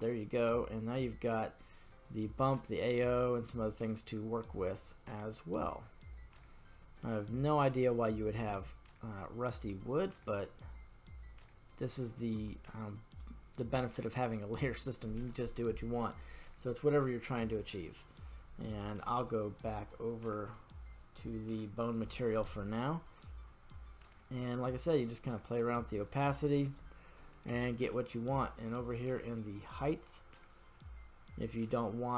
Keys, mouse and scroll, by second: 0.5-0.9 scroll down 2, 2.0-3.2 drag, 3.6-6.4 drag, 6.8-8.1 drag, 8.5-9.7 middle drag, 10.5-12.4 drag, 12.8-13.2 middle drag, 13.5-14.2 scroll up 2, 14.2 scroll down 1, 14.7 scroll down 2, 14.8-15.3 middle drag, 17.8-21.6 drag, 22.4 middle click, 24.3-26.1 drag, 26.7-28.0 middle drag, 29.2 click, 30.8-31.8 drag.